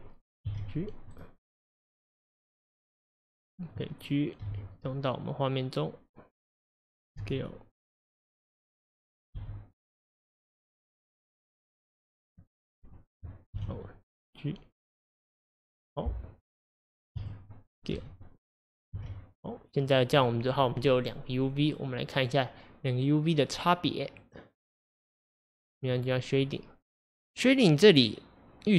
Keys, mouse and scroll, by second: 0.5 g, 1.6 click, 1.9 click, 4.5 g, 7.2 s, 9.4 g, 11.3 click, 11.6 click, 13.6 l, 14.8 click, 17.2 a, 18.0 s, 18.9 g, 20.2 click, 26.0 click.